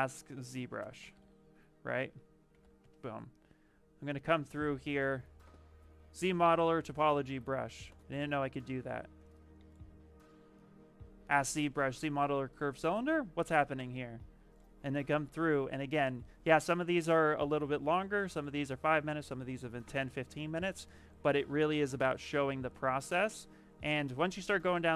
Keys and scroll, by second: 0.7 space, 0.8 z, 2.4 s, 2.7 Return.